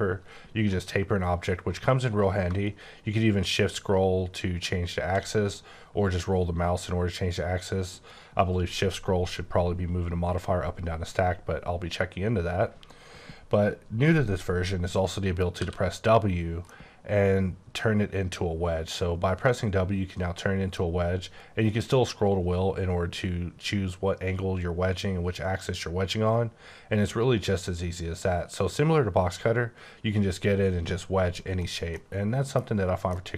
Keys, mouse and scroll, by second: 2.9 scroll up 2, 3.4-4.0 scroll down 1, 4.0-5.0 scroll down 5, 5.2 scroll, 5.3-7.5 scroll up 10, 15.6 w, 16.7 middle click, 21.2-23.4 scroll up 2, 23.4 scroll up 1, 25.4-26.4 scroll up 5, 26.4-27.1 scroll down 2, 27.1-28.8 scroll up 1, 28.8 scroll up 1, 31.5 right click, 31.9 middle click, 32.7 scroll up 2, 33.1 middle click.